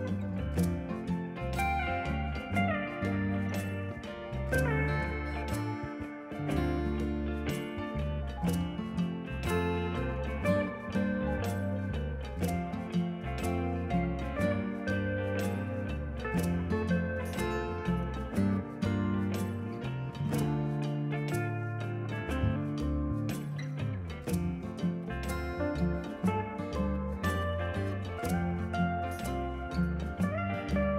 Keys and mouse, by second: 0.9 y, 1.7 click, 2.1 y, 2.5 click, 3.0 alt+y, 3.5 click, 4.1 alt+y, 4.6 click, 4.9 click, 6.5 click, 12.2 s, 12.5 click, 12.7 right click, 12.9 click, 13.3 s, 13.5 click, 15.5 click, 17.9 click, 19.9 Escape, 20.9 click, 21.7 click, 23.3 click, 23.5 Delete, 24.0 click, 24.2 shift+a, 24.9 click, 25.1 Delete, 26.1 ctrl+shift+a, 26.5 click, 26.6 right click, 26.8 click, 27.2 click, 28.3 click, 28.8 click, 29.1 Delete, 29.4 click, 30.0 right click, 30.7 click.